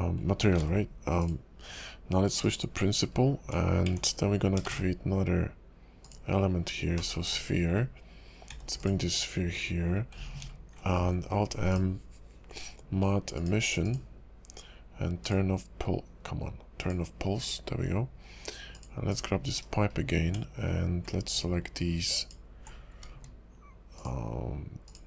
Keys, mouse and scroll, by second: 0.6 alt+m, 2.4 click, 3.1 scroll up 2, 3.4 Tab, 3.9 Tab, 4.1 scroll down 3, 4.6 shift+a, 6.1 scroll up 2, 6.3 scroll down 2, 6.9 /, 7.3-8.5 scroll down 11, 8.5 g, 10.4 alt+n, 13.3 click, 13.9 click, 16.8 click, 18.7 click, 19.1 click, 19.5 /, 19.9 scroll up 3, 20.2 Tab, 20.5-21.1 scroll up 2, 22.1 alt+click, 22.8 scroll up 1, 23.9 alt+shift+click, 24.8 alt+click.